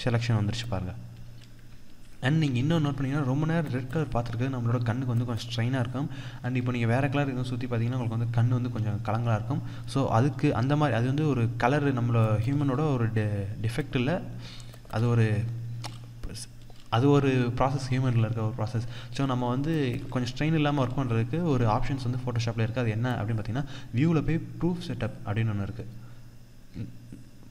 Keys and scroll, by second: 1.3 ctrl+0, 2.0 ctrl+=, 3.7 ctrl+=, 19.3 ctrl+-, 19.5 ctrl+space.